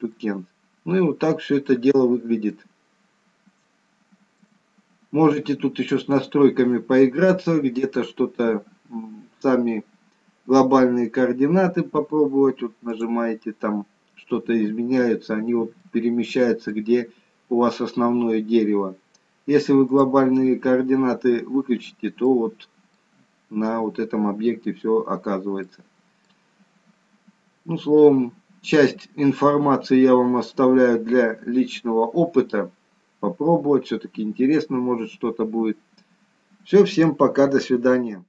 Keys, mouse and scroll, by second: 0.2 middle click, 0.5 click, 0.5 scroll up 2, 2.6 shift+middle click, 13.2 click, 15.3-15.7 scroll down 2, 16.0 middle click, 17.0 scroll down 2, 17.8-18.4 scroll down 2, 20.1 click, 21.2-22.1 scroll up 6, 22.4 middle click, 24.9 scroll up 1, 25.9 middle click, 28.1 scroll up 1, 28.9-29.4 scroll up 5, 30.4-31.3 scroll up 4, 31.5 scroll up 1, 31.6-32.2 scroll down 5, 34.4-34.8 scroll down 2.